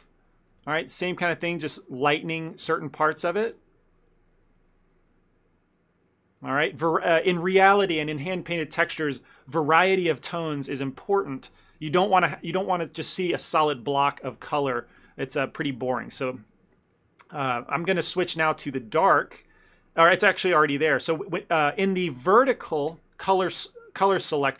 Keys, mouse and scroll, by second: 0.6 click, 0.6 f, 0.9 click, 1.1 click, 1.5 shift+middle click, 1.9 click, 2.1 click, 2.9 click, 3.5 click, 3.6 shift+middle click, 3.8 ctrl+middle click, 4.4 ctrl+middle click, 4.5 shift+middle click, 4.8 shift+middle click, 4.9 middle click, 5.2 middle click, 5.8 middle click, 6.2 shift+middle click, 6.5 ctrl+middle click, 6.8 shift+middle click, 6.8 shift+middle click, 7.0 ctrl+middle click, 15.9 ctrl+middle click, 16.2 middle click, 16.4 middle click, 16.5 ctrl+middle click, 16.7 ctrl+middle click, 16.9 shift+middle click, 17.0 shift+middle click, 18.3 ctrl+middle click, 18.9 middle click, 19.2 middle click.